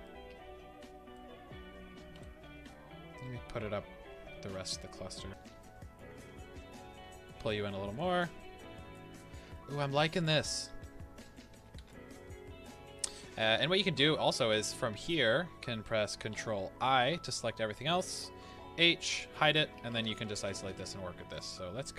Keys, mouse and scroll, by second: 0.0-5.3 middle drag, 3.7 g, 5.3 KP_7, 6.2 g, 7.9 click, 8.3-15.0 middle drag, 10.8 Tab, 11.8 alt+a, 15.0 click, 16.3 ctrl+i, 18.4 h, 18.9 scroll up 1, 19.4 Tab, 19.8-21.9 shift+middle drag, 20.1 a.